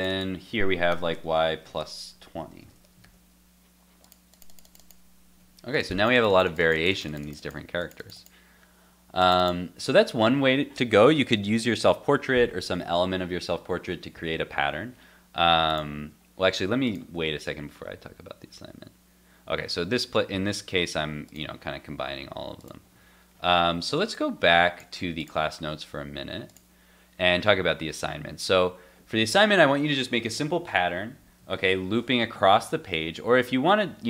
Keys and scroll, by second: 2.4 super+s, 2.7 super+Tab, 3.0 super+r, 31.5 shift+super+}.